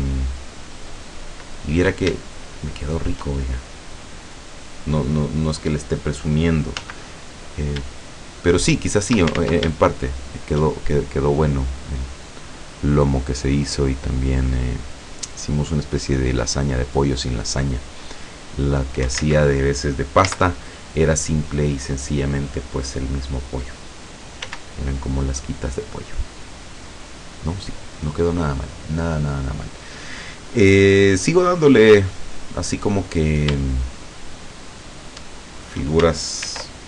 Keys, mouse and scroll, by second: 0.2 middle click, 0.9 middle click, 1.3 scroll down 1, 1.5 middle click, 2.9 shift+click, 2.9 shift+right click, 3.3 shift+click, 3.9 middle click, 4.1 scroll down 2, 5.0-6.3 middle drag, 6.8 z, 7.4 scroll up 2, 8.5 shift+right click, 9.5 ctrl+shift+z, 10.3 shift+right click, 14.3-15.6 drag, 16.2-19.0 drag, 19.3 ctrl+z, 20.3 z, 24.5 s, 27.0 click, 32.9 click, 33.7-35.3 shift+drag, 35.6 shift+scroll up 2, 36.5 ctrl+r.